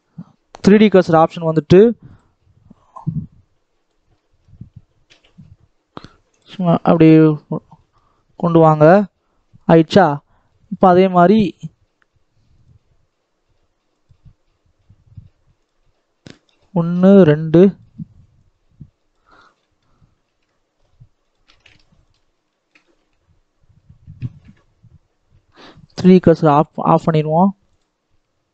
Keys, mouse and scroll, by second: 4.0 middle click, 4.9 g, 6.5 scroll down 3, 6.5-7.9 middle drag, 7.9 scroll down 3, 8.2 middle click, 8.6-9.5 scroll down 1, 9.5 scroll down 1, 10.7 scroll down 1, 10.9-11.5 scroll up 4, 11.5-12.6 scroll down 1, 14.1 scroll down 2, 17.3-18.3 middle drag, 18.3 click, 19.3-20.1 scroll up 3, 19.5 shift+middle click, 20.1 alt+a, 21.2 click, 21.4 alt+a, 22.0 alt+click, 22.2 scroll up 2, 22.5 shift+middle click, 22.9 e, 26.7 click, 26.9 s.